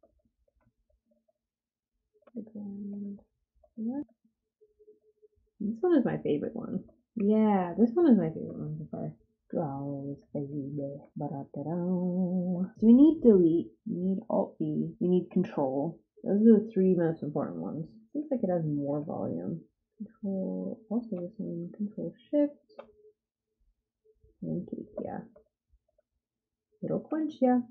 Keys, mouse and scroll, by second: 0.0-4.5 typing, 7.1 f, 7.6 g, 8.4 f, 8.9 g, 10.9 ctrl+z, 11.9 ctrl+click, 18.0 g, 19.2 ctrl+click, 19.7 ctrl+click, 21.6 ctrl+shift+click, 23.2-24.6 ctrl+drag, 25.3 f, 25.8 g, 27.0 f, 27.6 g.